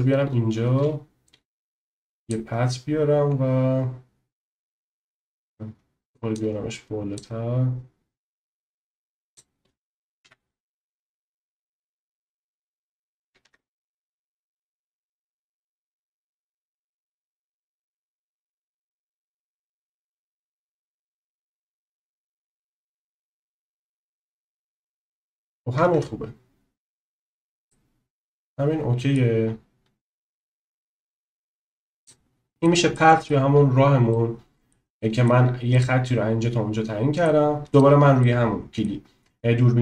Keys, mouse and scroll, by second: 0.6 shift+a, 4.7-5.5 middle drag, 6.3 click, 8.4 click, 10.2 KP_7, 13.5 Tab, 14.2 click, 15.3 shift+middle click, 16.9 e, 20.3 e, 23.7 click, 24.1 e, 26.0 Tab, 27.7-29.1 drag, 30.9 click, 32.5 middle drag, 32.9 middle click, 34.1-34.7 middle drag, 34.9-35.3 middle drag, 35.7-37.3 middle drag, 37.7 click, 38.3 middle click.